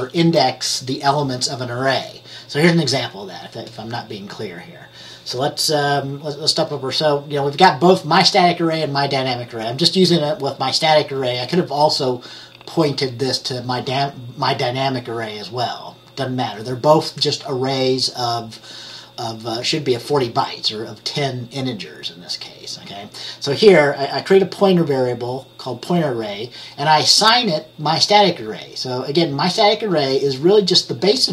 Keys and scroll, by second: 6.6 F10.